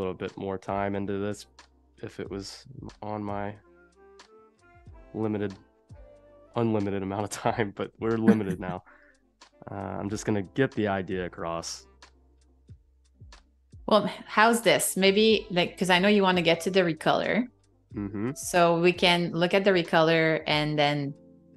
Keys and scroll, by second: 8.0 super+z, 12.4 super+z.